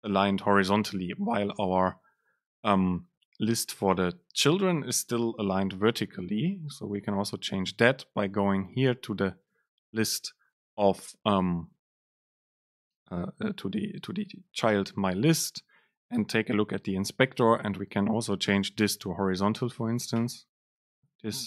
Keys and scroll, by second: 18.6 super+space.